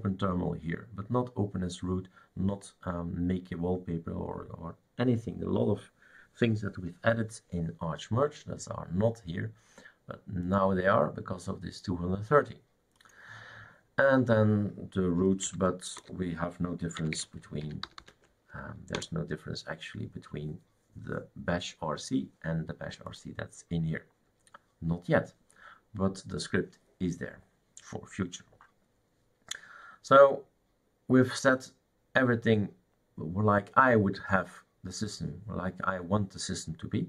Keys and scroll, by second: 15.2 Caps_Lock, 15.4-18.5 typing, 18.9 Return.